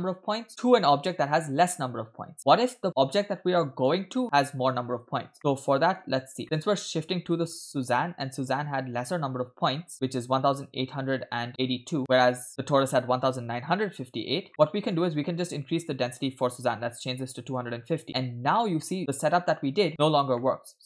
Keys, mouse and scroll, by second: 0.5-3.0 drag, 3.5-3.9 shift+middle drag, 5.1 scroll down 2, 5.4 middle click, 6.7-7.0 scroll up 2, 7.1 middle click, 7.4 scroll up 2, 11.5 middle click, 14.5 middle click, 15.1 scroll up 1, 16.1-17.6 drag, 18.1 middle click, 20.4-20.8 middle drag.